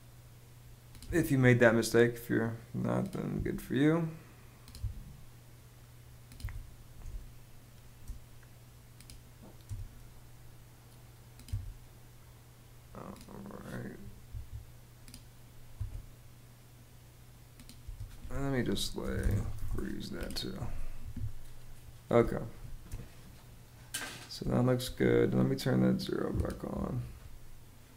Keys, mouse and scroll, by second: 0.7 BackSpace, 3.0 BackSpace, 4.4 BackSpace, 6.0 BackSpace, 6.7 space, 9.3 BackSpace, 11.1 BackSpace, 13.9 Escape, 15.4 BackSpace, 17.4-19.7 typing, 20.6 Escape, 21.9 space, 24.1 space.